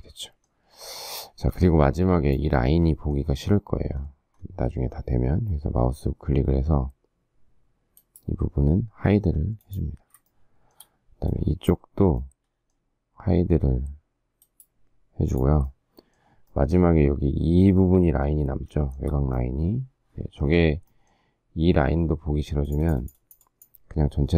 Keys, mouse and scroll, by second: 0.9 shift+middle click, 1.4 space, 10.3 shift+middle click, 18.9 shift+middle click.